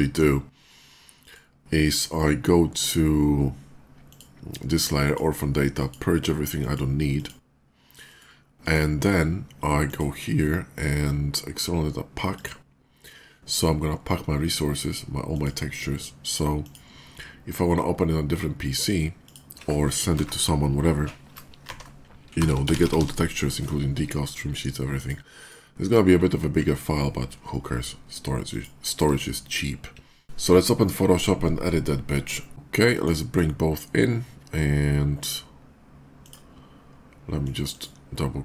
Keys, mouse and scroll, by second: 1.0 click, 3.8 click, 4.8 click, 5.5 click, 6.5 click, 7.0 click, 7.9 click, 8.4 click, 9.6 click, 12.1 click, 15.2 click, 16.5 click, 18.4 click, 19.0 click, 20.0 Left, 21.4-22.8 typing, 24.7 click, 25.2 click, 28.3 click, 32.5 ctrl+click, 36.1 click, 37.2 click, 37.5 click.